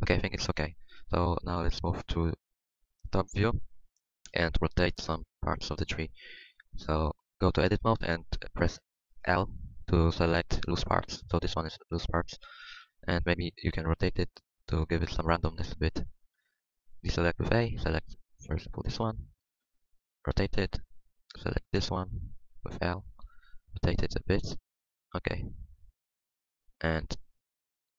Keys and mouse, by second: 2.1 KP_7, 3.6 Tab, 4.0 Tab, 5.5-6.9 drag, 6.1 Tab, 6.3 Tab, 6.9 Tab, 9.6 l, 10.5 middle click, 12.8 KP_7, 14.2 KP_7, 14.9 r, 16.7 a, 17.8 l, 19.0 r, 20.8 a, 21.7 l, 22.8 l, 23.7 r, 24.7 Tab, 24.7 r, 26.0 Tab.